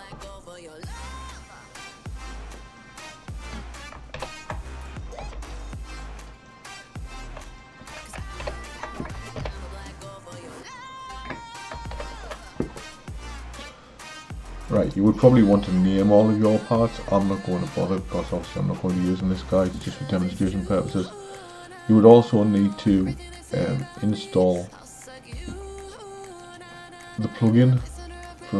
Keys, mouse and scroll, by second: 2.3 click, 4.2 ctrl+j, 5.3 h, 6.0 click, 7.5 shift+click, 8.5 ctrl+j, 9.4 h, 9.8 click, 12.0 alt+h, 17.8 click, 23.6-26.6 drag.